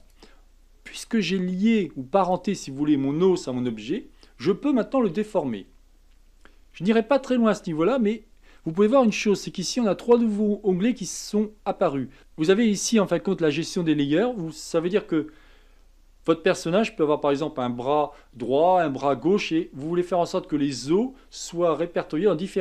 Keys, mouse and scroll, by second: 0.0 click, 1.1 r, 11.1 click.